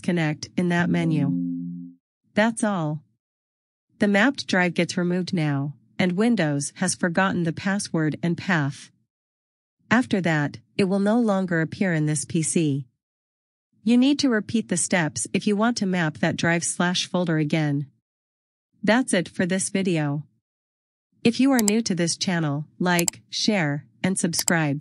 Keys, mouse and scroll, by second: 3.3 click, 4.0 right click, 5.9 click, 20.8 click.